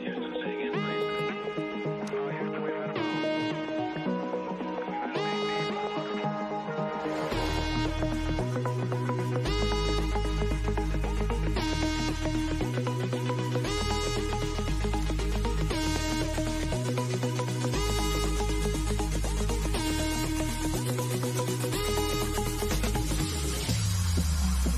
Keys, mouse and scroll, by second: 1.3 click, 6.7 click, 11.3 Return, 14.3 click, 20.7 click, 21.6-23.5 scroll down 1.